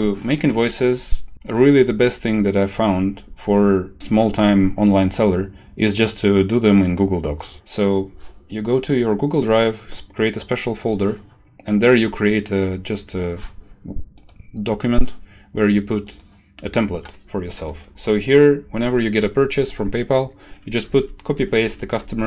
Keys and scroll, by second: 20.9 shift+Down.